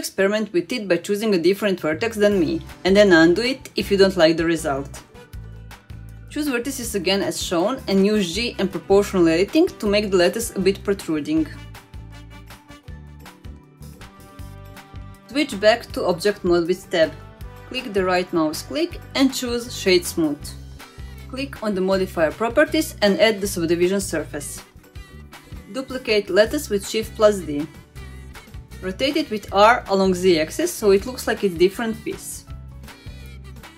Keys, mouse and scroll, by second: 0.3-0.7 middle drag, 1.3 shift+click, 1.8 middle click, 2.2 shift+drag, 2.4 middle click, 2.8 shift+drag, 3.2 shift+click, 3.4 middle drag, 3.7 scroll up 1, 4.0 shift+drag, 4.4 shift+click, 4.6 middle drag, 5.5 shift+drag, 5.7-6.1 middle drag, 6.5 shift+click, 6.9 shift+click, 7.1 middle click, 7.3 scroll down 1, 7.5 middle click, 8.0 g, 11.1 middle click, 11.5 shift+middle click, 12.0 middle click, 12.5 scroll up 1, 12.6 middle click, 13.0 click, 13.2 middle click, 13.6 ctrl+click, 13.8 middle click, 14.0 g, 16.4 Tab, 16.7-17.0 middle drag, 17.4-18.8 right drag, 20.9 click, 21.6-24.2 drag, 24.6-26.1 middle drag, 27.0 middle click, 27.5 shift+d, 29.9 r.